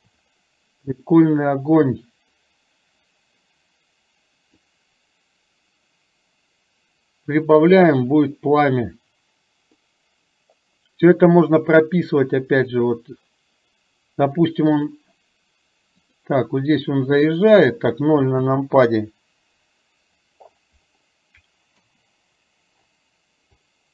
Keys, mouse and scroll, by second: 4.8-8.4 drag, 9.8-15.7 drag, 18.4 KP_0, 21.8 KP_0.